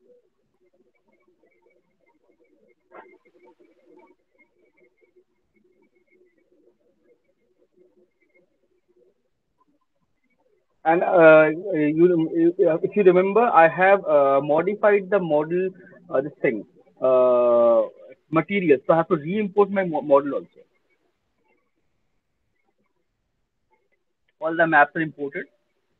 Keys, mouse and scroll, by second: 25.8 click.